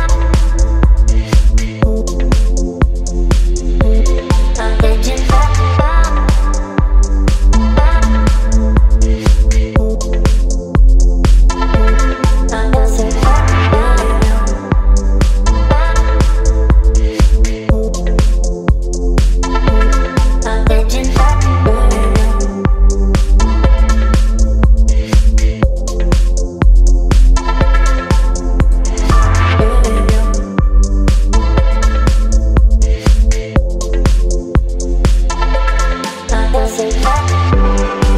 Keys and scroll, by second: 1.1 Delete, 6.9 Delete, 11.1 Delete, 17.6 v, 19.7 space, 30.5 KP_1, 30.7 KP_0, 34.4 space.